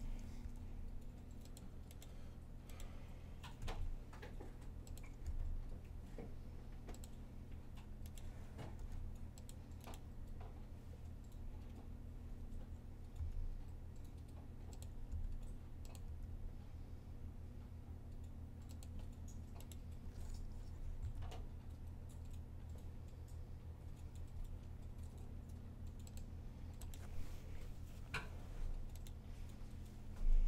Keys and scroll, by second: 0.3 super+r, 3.4 r, 5.1 g, 7.7-8.6 typing, 13.0 g, 14.7-15.9 typing, 20.8 g, 23.1-23.8 typing.